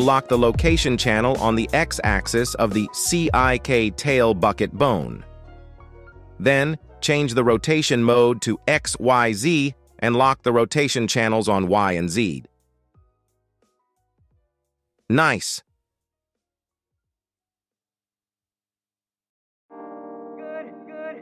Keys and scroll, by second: 1.3 g, 1.5 x, 2.2 Escape, 5.2 g, 6.1 Escape, 6.8 g, 14.2 r, 15.2 Escape, 15.9 g, 16.8 Escape, 18.0 alt+g, 19.0 r, 19.5 z.